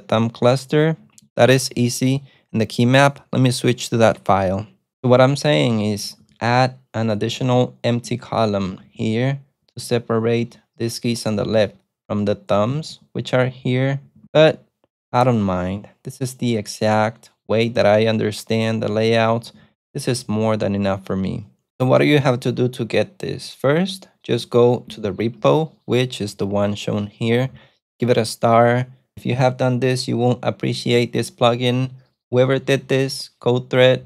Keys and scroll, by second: 5.5-10.4 typing, 11.5-14.9 typing, 18.8-21.0 typing, 25.2 super+Tab.